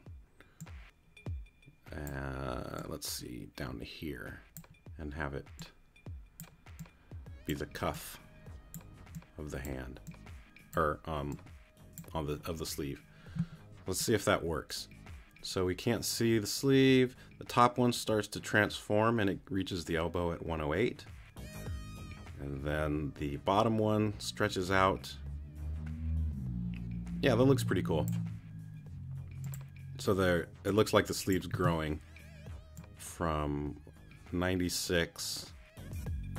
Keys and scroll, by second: 31.5 space.